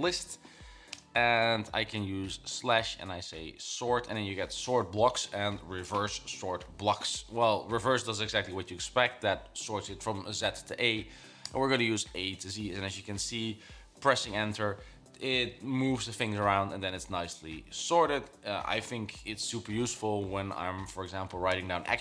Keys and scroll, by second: 2.4-3.6 typing.